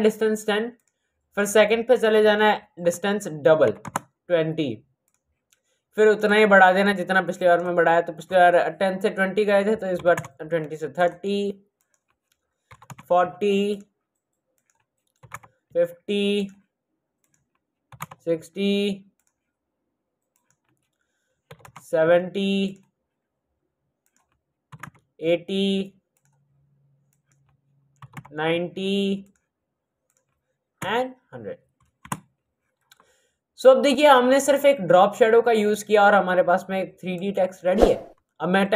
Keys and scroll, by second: 3.7 KP_2, 10.0 KP_3, 10.1 KP_0, 12.7 KP_4, 15.1 KP_5, 15.2 KP_0, 17.9 KP_0, 21.4 KP_7, 21.5 KP_0, 24.7 KP_8, 24.8 KP_0, 27.9 KP_9, 28.1 KP_0, 30.8 KP_0, 31.9 Return.